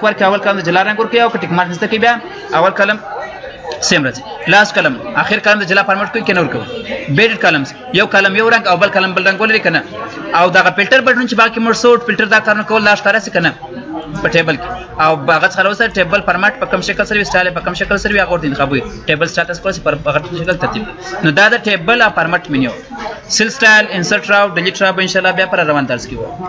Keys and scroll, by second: 25.9 F10.